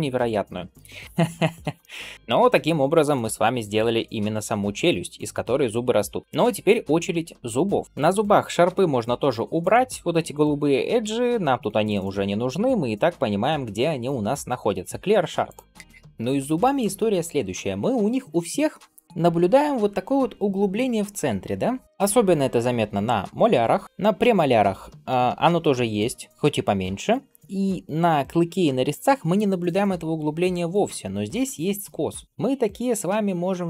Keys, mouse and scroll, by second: 0.0-1.0 middle drag, 1.2 ctrl+s, 1.6 shift+middle drag, 2.0 middle click, 7.8 middle click, 7.8-8.4 scroll down 2, 8.5 a, 9.5 click, 10.9 a, 12.2-15.4 right drag, 15.6 KP_7, 32.2-32.7 scroll down 1.